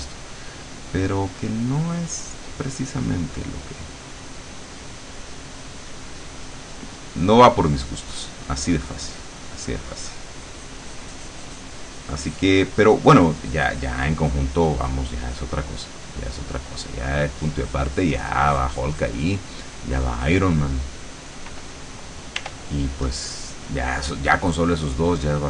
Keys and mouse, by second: 3.7-20.6 drag, 21.8 click, 22.5 r, 23.8 click.